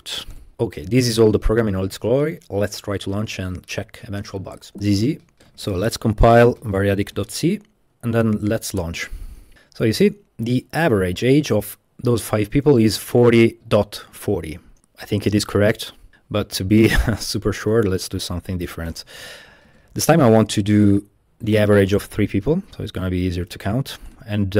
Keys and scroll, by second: 0.0-0.2 typing, 4.7 Escape, 4.7-7.1 typing, 7.2 Return, 8.5 Tab, 8.8 Return, 17.7-19.2 typing, 19.7 Tab, 21.6-22.8 typing, 22.7 Right, 22.8 Tab, 22.9 Tab, 23.0 Tab, 24.1-24.5 typing.